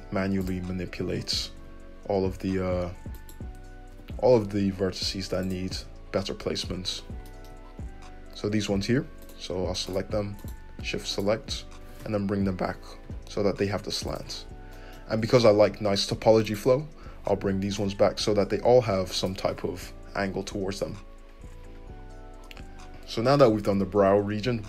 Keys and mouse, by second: 1.6 `, 1.8-3.1 middle drag, 3.1 click, 3.3-9.2 middle drag, 3.9 g, 5.7 `, 9.2 click, 9.8 click, 10.4 shift+click, 11.1 shift+click, 11.8 g, 13.0-16.4 shift+middle drag, 16.4 right click, 16.5 middle click, 17.5-21.9 drag, 17.5 g, 20.8 `, 21.9-24.6 middle drag.